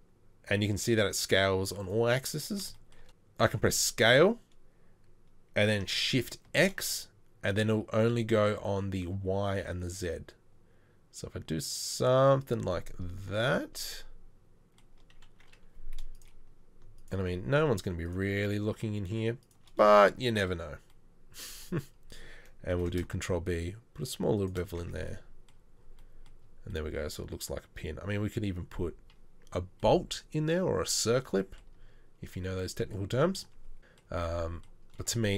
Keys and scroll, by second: 3.0 shift+s, 22.8 ctrl+r, 22.8 ctrl+b, 24.8 Tab, 33.8 KP_1.